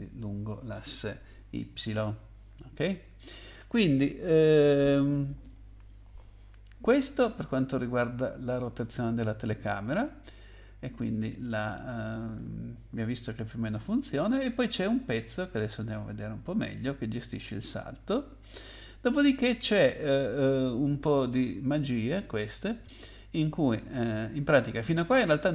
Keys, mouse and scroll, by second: 2.9-4.1 scroll down 1, 5.5-6.7 scroll down 1, 7.4 scroll up 2, 8.0-8.6 scroll up 1, 9.2 click, 11.4 click, 12.3 scroll down 2, 13.1 scroll down 2, 14.9 click, 17.4 scroll down 2, 21.7 click, 24.1-25.3 scroll up 5.